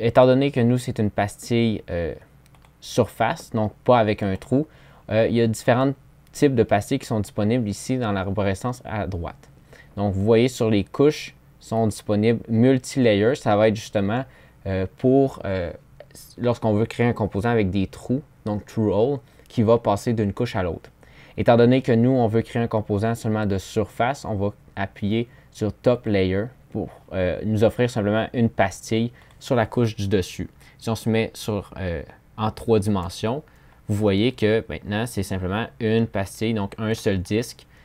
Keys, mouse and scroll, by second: 30.4 3.